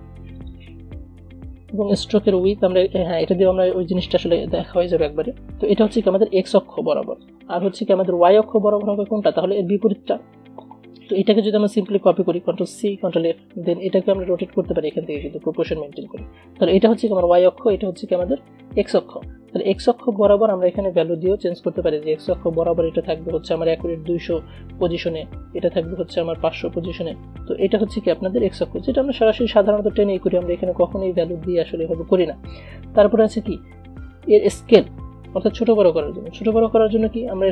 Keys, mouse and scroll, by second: 3.5 click, 7.3-12.9 drag, 12.9 ctrl+c, 15.1-16.8 drag, 16.8-19.0 drag, 20.0 Delete, 21.3 click, 23.4 ctrl+a, 25.1 click, 26.0 ctrl+a, 29.0-37.5 drag.